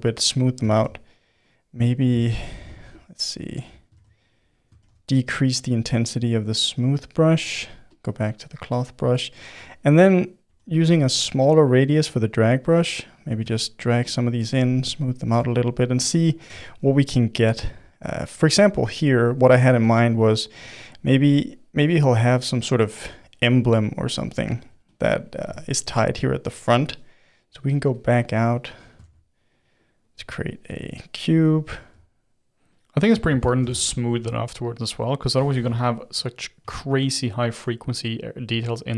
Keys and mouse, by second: 0.7 shift+f, 2.1 shift+f, 3.9 shift+s, 4.8 shift+f, 7.9 click, 8.5-9.9 middle drag, 9.9 f, 10.4 f, 11.2 f, 11.6 middle click, 12.1-16.6 drag, 16.6 middle click, 17.3-18.7 drag, 18.7-19.8 middle drag, 19.8 f, 20.5-21.8 drag, 21.8 middle click, 22.3-23.4 drag, 23.4 middle click, 23.8-25.6 drag, 25.6-28.0 middle drag, 28.0 click, 28.5-30.8 middle drag, 30.8 shift+a, 32.0 s, 33.0-35.6 middle drag, 35.6 g, 36.6 s, 37.9 middle click, 38.5 s.